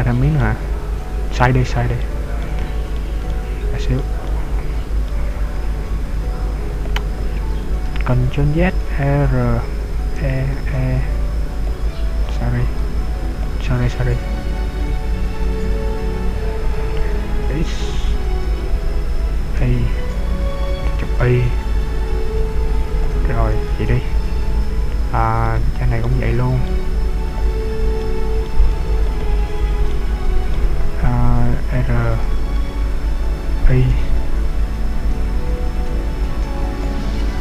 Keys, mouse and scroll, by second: 0.1 middle click, 1.8 middle click, 2.6 middle click, 3.4 shift+middle click, 4.3 middle click, 5.7 e, 7.0 click, 8.1 ctrl+z, 8.8 r, 11.9 click, 12.0 ctrl+z, 12.9 e, 13.5 click, 14.7 ctrl+z, 15.7 r, 23.2 click, 23.9-24.5 scroll up 2, 24.5 scroll down 2, 25.5 right click, 26.1 middle click, 27.2 shift+click, 28.1 middle click, 29.3 shift+right click, 29.9 middle click, 32.2 r, 36.9 click, 37.1 middle click.